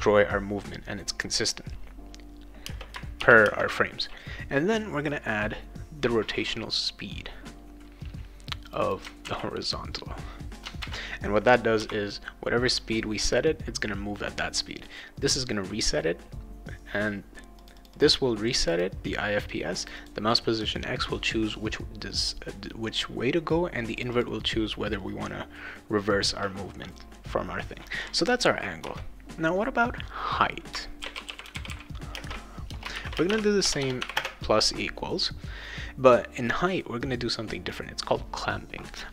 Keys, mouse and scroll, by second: 2.6 space, 3.2 shift+8, 3.4 space, 8.6 click, 8.8 click, 10.6 click, 10.8 ctrl+v, 11.8 ;, 17.6 click, 17.8 click, 18.5 click, 18.7 click, 19.8 click, 20.0 click, 23.9 click, 24.1 click, 26.9 click, 28.8 Return, 30.7-34.1 typing.